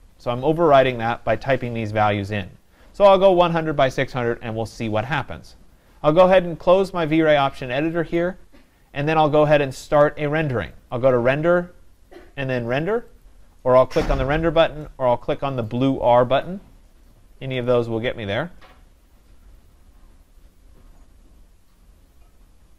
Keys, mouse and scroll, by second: 8.2 click, 10.8-18.3 drag.